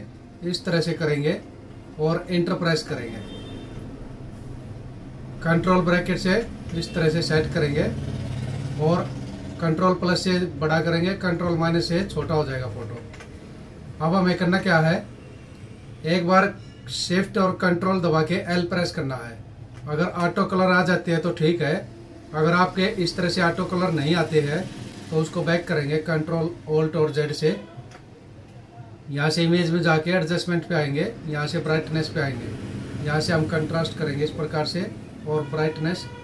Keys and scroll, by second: 0.9 Left, 5.7 ctrl+-, 5.8 ctrl+0, 8.3 ctrl+=, 11.2 ctrl+-, 12.3 ctrl+=, 13.4 ctrl+-, 18.5 ctrl+shift+l, 26.8 ctrl+alt+z.